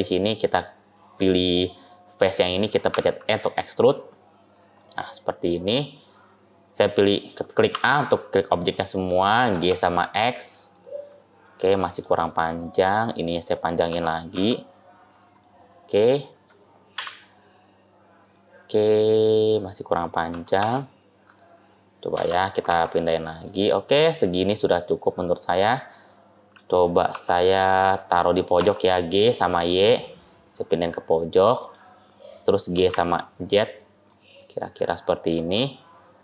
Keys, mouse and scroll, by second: 1.0 click, 2.8 e, 4.6 middle click, 7.6 a, 9.4 g, 11.5 middle click, 12.3 click, 12.8 middle click, 13.8 g, 15.3 middle click, 16.8 KP_7, 17.9-18.3 scroll down 3, 18.2 middle click, 20.2 g, 22.0 a, 22.3 g, 23.4 middle click, 25.1 middle click, 27.0 g, 30.7 middle click, 31.9-32.6 scroll down 1, 32.6 g, 34.2 middle click, 35.4 click, 36.0 middle click.